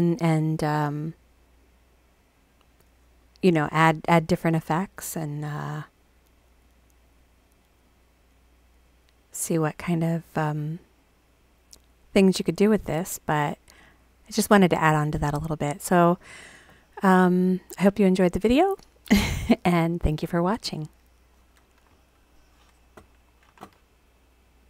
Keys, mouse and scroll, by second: 2.5 click, 5.5 click, 6.6 click, 7.8 click, 8.3 click, 24.6 click.